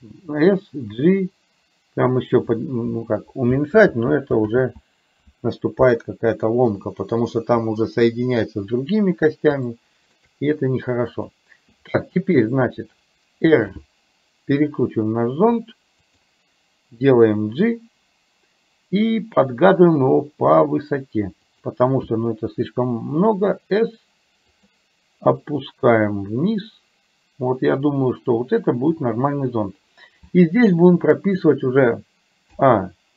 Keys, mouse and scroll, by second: 0.4 g, 3.7 ctrl+z, 4.5 ctrl+z, 9.9 shift+middle click, 13.6 r, 17.1 g, 23.4 s, 25.6-29.0 drag, 30.9 shift+middle click, 32.6 a.